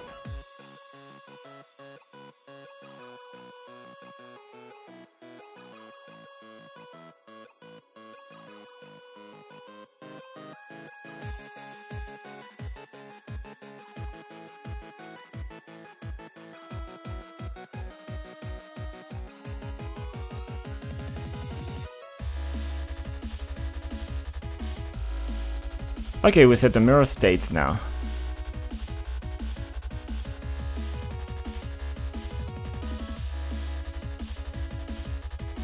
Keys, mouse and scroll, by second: 0.0 click, 1.1 click, 1.2 double click, 1.8 double click, 2.4 click, 3.6 click, 4.2 click, 5.4 click, 6.9 click, 8.9 click, 11.6 click, 13.7 click, 14.8 click, 15.3 click, 15.6 click, 16.9 F5, 18.8-23.2 typing, 25.0 click, 25.7 click, 26.9 click, 27.4 click, 28.4 click, 28.4 double click, 29.2 double click, 29.6 ctrl+click, 30.0 click, 30.5 click, 31.2 scroll down 1, 31.8 click, 32.9 F5, 34.2-35.6 typing.